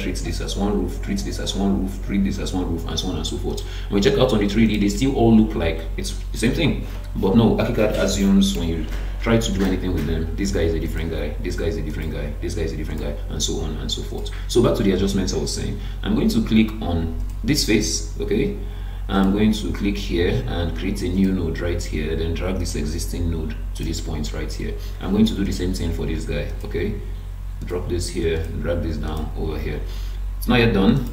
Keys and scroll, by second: 8.8 Escape.